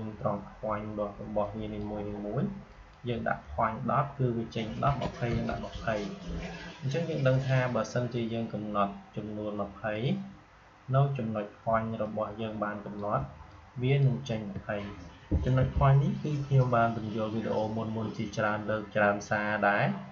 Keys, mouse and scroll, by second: 1.4-2.7 drag, 7.3 click, 9.9 click, 12.0-16.5 shift+drag.